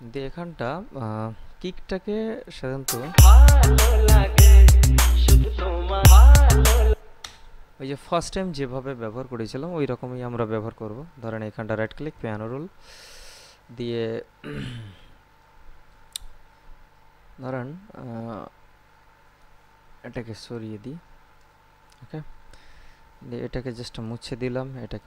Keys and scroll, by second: 3.2 space, 7.2 space.